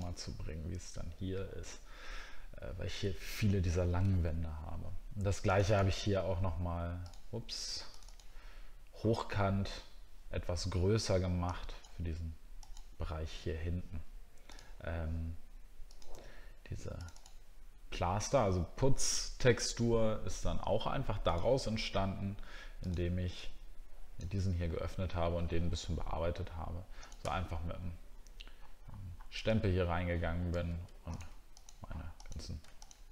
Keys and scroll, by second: 27.7 alt+scroll up 1.